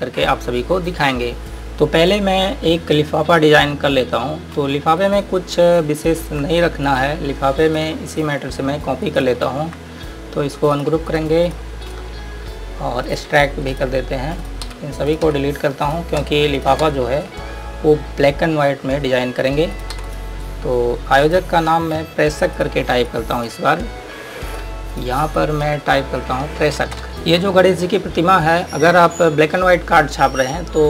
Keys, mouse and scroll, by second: 5.3 click, 7.1 click, 9.3 ctrl+right click, 11.0 click, 14.9 Delete, 15.4 click, 15.5 Delete, 16.1 click, 16.5 Delete, 16.8 click, 17.1 Delete, 17.9-18.3 scroll down 1, 18.7 scroll up 1, 20.0 click, 20.2 Delete, 20.3-20.6 scroll down 1, 20.6 scroll up 1, 21.5 click, 22.0 Delete, 22.7 click, 26.6 F8, 27.1 scroll down 1, 27.9-28.3 scroll up 1.